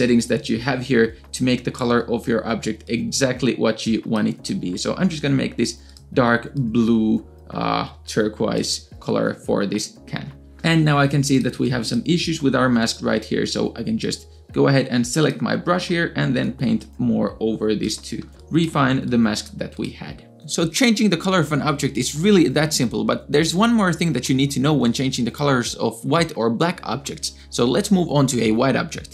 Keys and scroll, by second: 10.7 space, 11.2 space, 11.3 space, 18.2 space, 19.5 space.